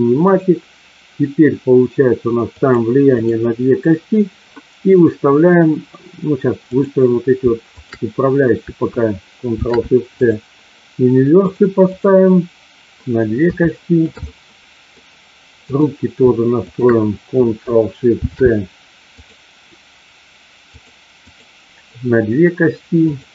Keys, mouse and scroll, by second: 2.6 click, 3.2 click, 7.8 shift+click, 9.5 ctrl+shift+c, 11.5 click, 11.8 click, 13.6 shift+middle click, 14.2 middle click, 15.6 click, 16.7 shift+click, 18.1 ctrl+shift+c, 20.6 click, 21.1 click, 23.1 click.